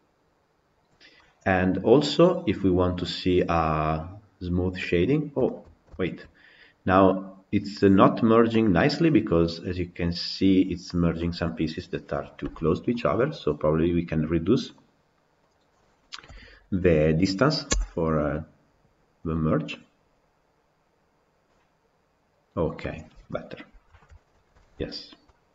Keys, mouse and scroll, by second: 1.0-4.9 middle drag, 4.9 scroll up 2, 5.3-21.6 shift+middle drag, 23.1 middle click, 23.9-24.4 scroll down 2, 24.4-25.5 shift+middle drag.